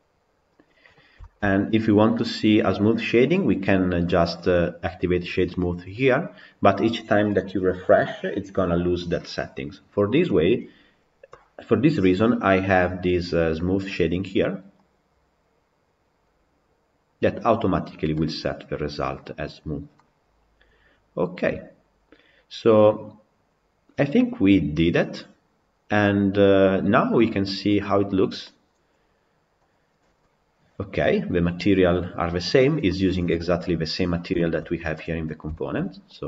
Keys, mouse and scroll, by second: 18.7-19.8 drag, 19.8-22.8 middle drag, 29.4 click, 30.0-32.2 middle drag, 32.2 scroll down 4, 32.7 middle click, 33.1-33.6 scroll down 4, 34.2-36.0 shift+middle drag, 36.0 click.